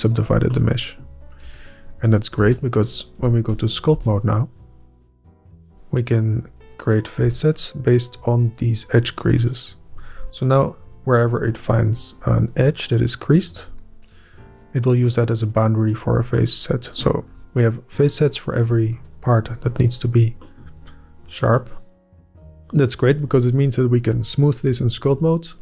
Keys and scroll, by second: 1.4 Up, 2.0 Up, 3.1 Up, 3.9 Up, 4.5 Up.